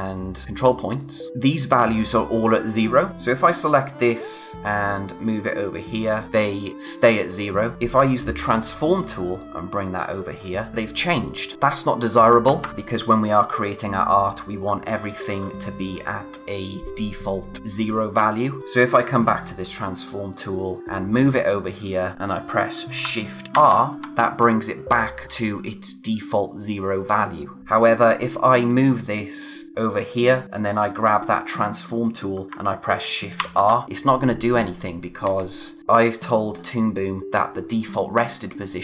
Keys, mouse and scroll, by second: 0.4 click, 3.0 scroll down 1, 3.1 click, 7.7 z, 8.2 click, 12.4 ctrl+z, 12.7 click, 14.1-14.9 scroll down 1, 18.1-18.6 scroll up 1, 18.6 click, 19.6 click, 23.5 shift+r, 27.7 click, 33.3 shift+r.